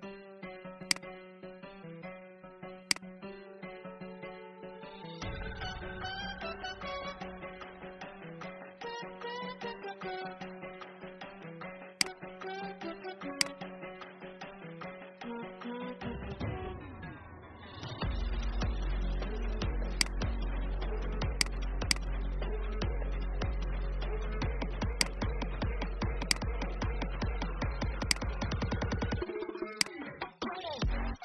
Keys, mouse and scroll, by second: 0.7-3.8 drag, 5.6 shift+scroll, 7.3-7.6 shift+scroll, 10.6 shift+scroll, 11.8 click, 16.1-16.7 Up, 19.9 click, 23.4 b, 24.9 click, 25.6 i, 26.9 v, 27.9 shift+click, 29.6 shift+click.